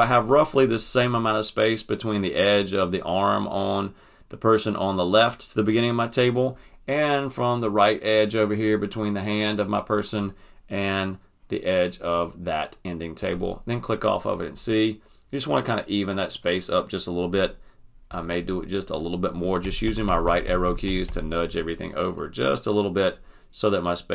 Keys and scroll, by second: 19.6 Right, 20.8 Right.